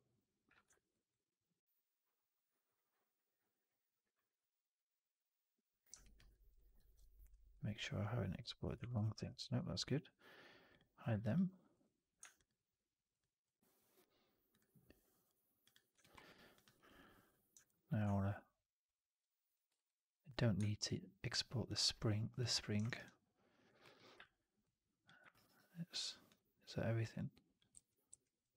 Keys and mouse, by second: 5.9 alt+drag, 6.2 alt+middle drag, 6.4 alt+right drag, 6.7 alt+click, 9.0 ctrl+z, 9.4 alt+drag, 11.1 alt+drag, 11.6 click, 15.9 alt+middle drag, 16.1 alt+right drag, 16.4 alt+drag, 16.7 alt+right drag, 16.9 alt+middle click, 17.5 alt+right drag, 19.6 alt+right drag, 22.7 alt+right drag, 22.9-23.6 alt+drag, 23.7 alt+middle click, 25.2 alt+right drag, 25.4-26.2 alt+drag, 26.9-27.6 drag, 27.7 ctrl+z, 28.0 ctrl+z.